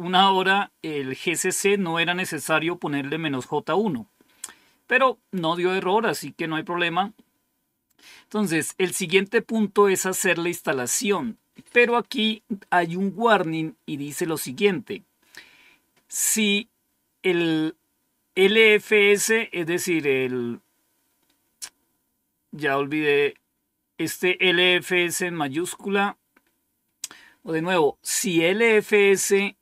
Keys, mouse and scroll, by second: 8.4 End, 8.6 Down.